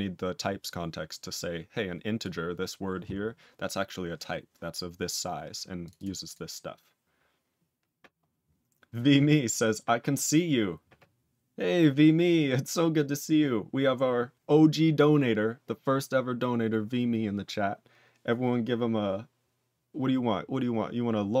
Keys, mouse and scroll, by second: 1.3 click, 2.1 click, 5.8 click, 5.9 double click, 6.2 click.